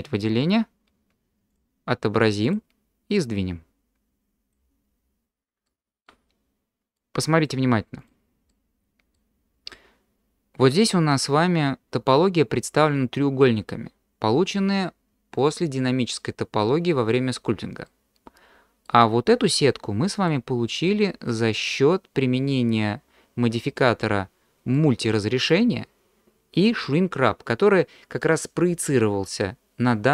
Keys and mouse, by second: 1.5 click, 3.2-4.5 drag, 5.6-6.0 shift+drag, 7.0-7.5 drag, 8.5-9.1 middle drag, 9.7-10.7 middle drag, 17.8-18.8 middle drag, 19.7-20.3 middle drag, 20.9-23.6 middle drag, 24.7-25.5 middle drag.